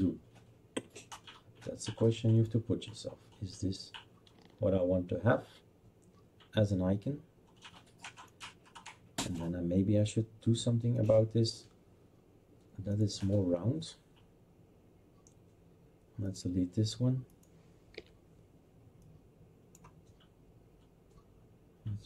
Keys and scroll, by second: 17.9 Delete.